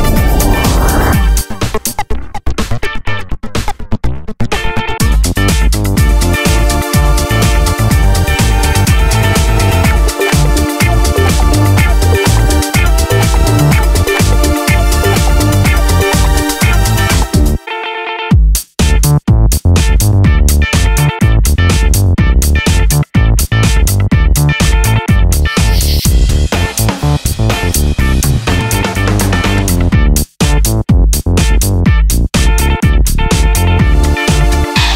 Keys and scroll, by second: 9.9 Tab, 10.1 Tab, 10.3 Down, 16.2 super+d, 20.4 super+d, 20.8 super+d.